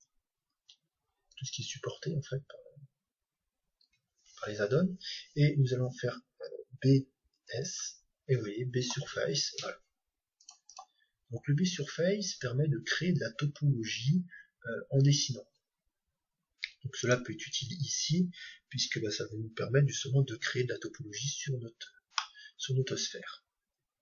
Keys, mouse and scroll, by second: 17.1-20.4 right drag, 20.4-24.0 middle drag.